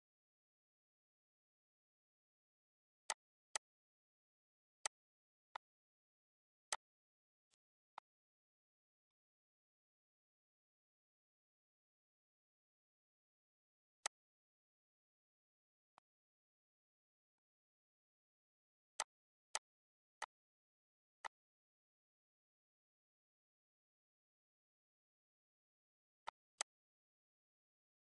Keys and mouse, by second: 3.1 click, 3.3 z, 3.5 click, 4.8 click, 5.5 click, 6.6 click, 7.4 click, 9.0 click, 14.0 click, 15.9 click, 17.0 z, 17.3 click, 18.9 click, 20.2 click, 21.2 click, 26.2 click.